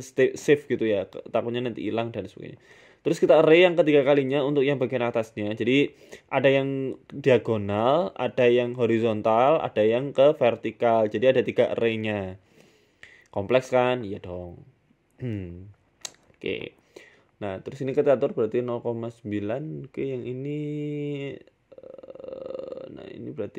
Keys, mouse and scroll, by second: 6.1 click, 7.9-8.4 scroll up 11, 8.4 shift+middle click, 9.6 click, 12.0 click, 12.9 BackSpace, 14.5 click, 16.5 click, 17.1 click, 19.2 scroll down 7, 19.3 scroll up 2, 20.3 click, 23.2 click.